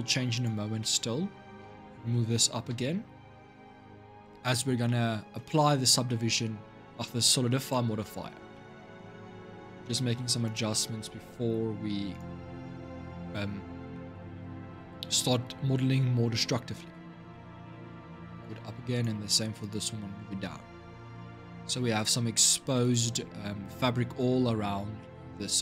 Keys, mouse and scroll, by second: 0.1 click, 0.6-1.8 shift+middle drag, 1.8 g, 4.6-8.0 middle drag, 8.0-8.3 scroll up 2, 8.3-9.6 middle drag, 9.6 click, 10.2 shift+click, 11.9 click, 12.4 shift+middle click, 13.3-13.7 scroll down 2, 13.7-16.1 shift+middle drag, 16.1 g, 18.7 click, 19.4 shift+click, 20.7 g, 24.8-25.6 shift+middle drag.